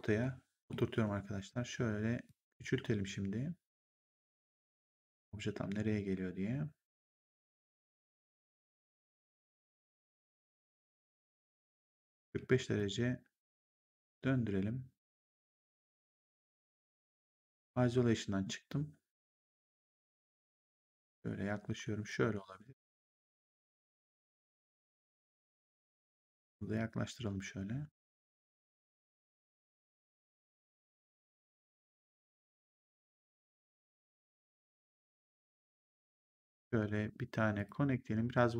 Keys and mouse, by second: 0.1 middle click, 0.8 r, 2.1 click, 5.5 w, 6.9 click, 8.2 r, 9.0 click, 10.1 e, 10.7 click, 12.2 w, 12.7 click, 17.3 ctrl+1, 20.5 click, 24.1 click, 25.8 click, 28.4 click, 34.1 click, 35.7 right click, 36.3 click, 37.4 click.